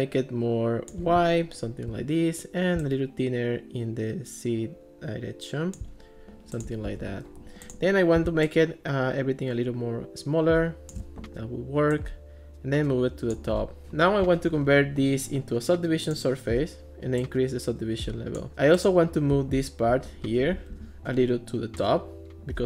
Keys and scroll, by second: 6.9 alt+r, 20.7 alt+r.